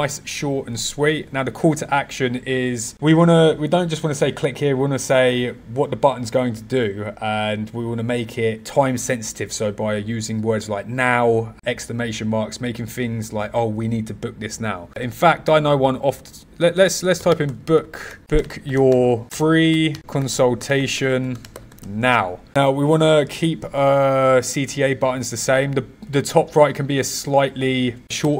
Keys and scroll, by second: 17.1 b, 19.9 c, 21.1-22.2 typing.